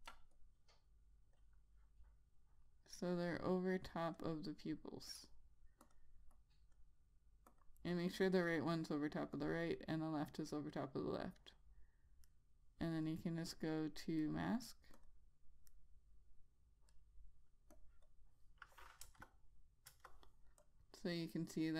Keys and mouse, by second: 0.4 ctrl+click, 12.8 right click, 15.5 click, 16.2 right click, 18.3 click, 19.6 Return, 20.4 Return, 21.1 click.